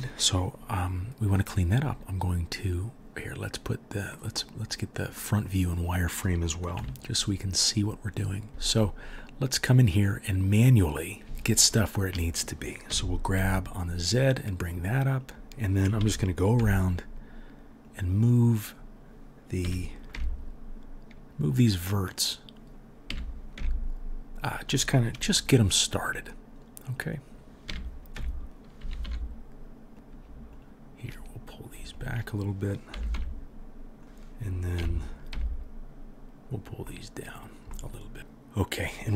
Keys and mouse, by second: 6.7 KP_1, 12.9 g, 16.0 g, 19.6 g, 22.2-22.8 middle drag, 22.2-22.8 right drag, 23.1 g, 26.9 middle click, 26.9 right click, 27.7 g, 28.8 g, 30.5 shift+middle click, 30.5 shift+right click, 31.9 shift+right click, 32.9 g, 34.8 g.